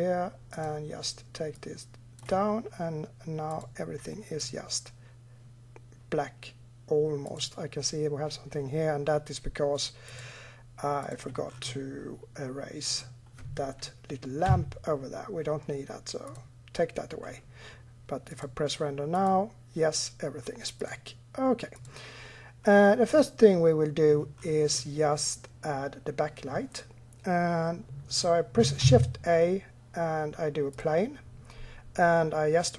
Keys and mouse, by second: 0.4-2.3 drag, 3.8 click, 4.7-6.6 drag, 7.1 click, 10.0 click, 10.9 click, 11.1 click, 12.7-14.3 right drag, 14.3 Delete, 17.9 click, 22.5 middle click, 23.0 middle click, 28.6 shift+a.